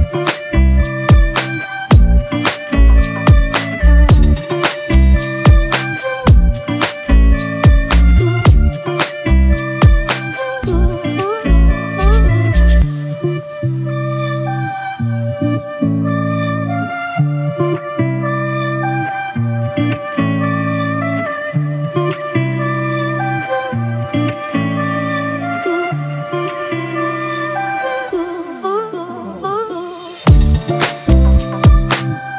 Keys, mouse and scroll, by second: 6.9 double click, 18.6 typing.